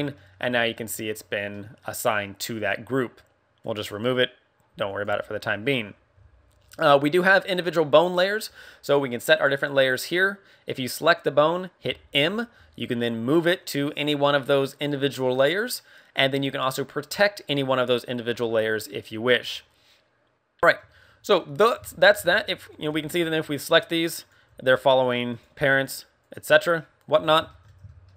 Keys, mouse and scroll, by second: 0.1 middle click, 1.0 right click, 1.4 middle click, 3.8 click, 4.8 click, 7.3 middle click, 11.0 right click, 11.9 m, 20.6 shift+middle click, 20.9-21.5 scroll down 3, 21.3 middle click, 21.8 shift+middle click, 22.2 a, 22.7 right click, 22.9 g, 23.7 right click, 24.1 right click, 24.5 r, 24.9 right click, 25.3 right click, 25.9 right click, 26.2 right click, 26.4 r, 27.1 right click, 27.1 KP_1.